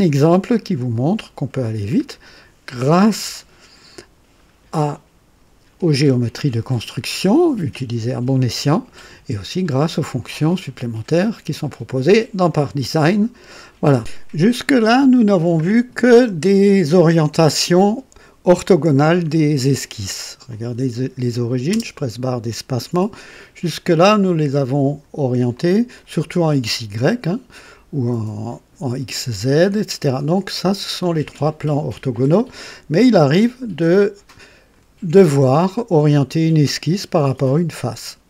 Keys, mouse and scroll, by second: 0.2-0.8 scroll up 2, 0.9 right click, 1.7 scroll down 1, 20.4 click, 21.7 space, 22.9 click, 23.9-25.2 drag, 25.5 click, 33.2-35.0 drag, 35.1-37.1 drag.